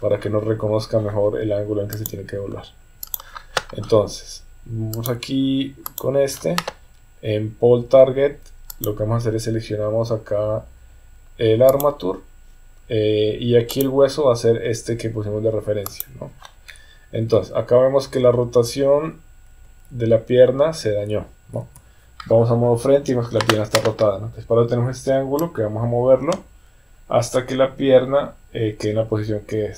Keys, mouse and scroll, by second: 2.1-3.2 drag, 5.0 click, 5.8 click, 8.7-11.8 drag, 13.7-16.0 drag, 17.3 KP_1, 19.6 KP_3, 21.6 KP_1, 25.5-29.7 drag.